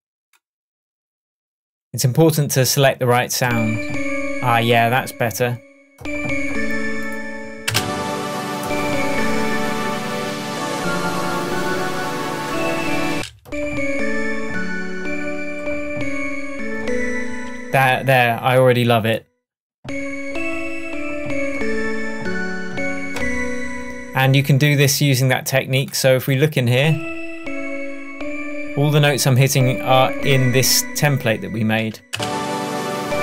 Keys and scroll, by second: 7.7 space, 13.2 space, 32.2 space.